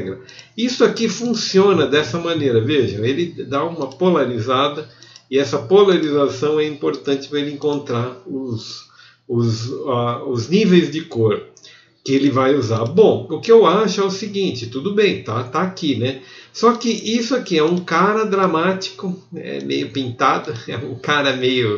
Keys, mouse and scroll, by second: 5.2 f, 8.8 ctrl+KP_Add.